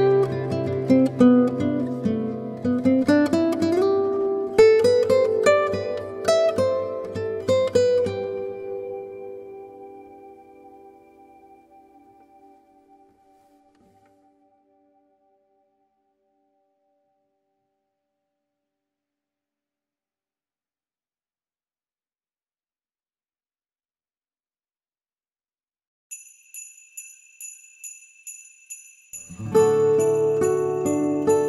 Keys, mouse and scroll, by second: 0.3 g, 2.3 click, 2.9 click, 4.2 click, 4.2 g, 5.2 middle click, 5.5 scroll up 1, 6.0 click, 6.2 middle click, 6.4 g, 7.4 middle click, 8.1 click, 8.2 g, 9.9 click, 10.4 g, 11.0 middle click, 11.3 g, 11.8 middle click, 12.7 Delete, 13.7 click, 15.2 click, 15.2 g, 15.3 g, 16.0 click, 16.2 g, 17.6 Delete, 18.6 shift+middle click, 18.8 scroll up 1, 19.0 middle click, 19.5-20.0 scroll down 1, 20.3 2, 20.6 click, 21.4 g, 22.6 ctrl+click, 23.5 Delete, 25.2 click, 25.7 g, 27.1 g, 27.6 Delete, 28.2 middle click, 28.8 click, 29.3 Delete, 30.1 click, 30.7 alt+click, 31.2-31.4 scroll down 4, 31.3 middle click.